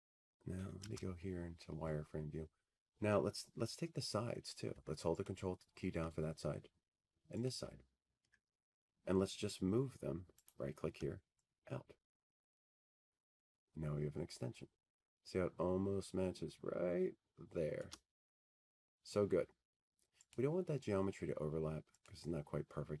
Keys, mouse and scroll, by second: 6.4 F3, 9.6 middle click, 10.9 ctrl+click, 13.1 ctrl+click, 16.2 click, 19.0 right click.